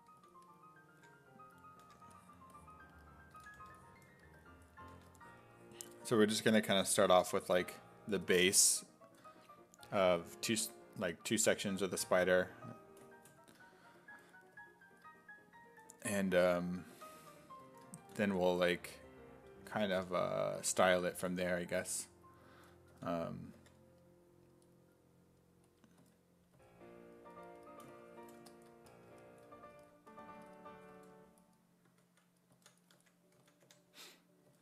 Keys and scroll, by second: 0.2 s, 1.0 1, 3.1-4.9 typing, 16.9 s, 17.2 1, 18.0 s, 19.5-20.4 typing, 22.9 s, 23.6 5, 26.0 s, 26.6 s, 30.4-34.6 typing.